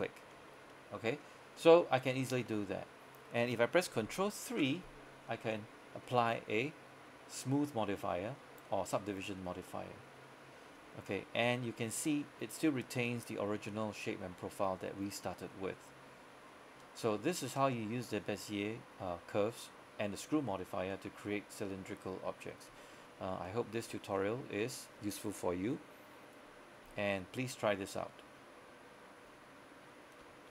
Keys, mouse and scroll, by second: 0.4 ctrl+Tab, 0.8 middle click, 1.4 scroll up 1, 1.7 middle click, 2.1-2.5 scroll up 1, 2.5 middle click, 4.6 ctrl+3, 6.8-8.7 middle drag, 8.7 scroll up 1, 8.9 middle click, 10.7-11.2 scroll down 1, 11.3 shift+middle click, 11.7-12.1 scroll up 1, 12.1-15.7 middle drag, 16.3-17.3 scroll up 1, 17.4 shift+middle click, 22.9 shift+middle click.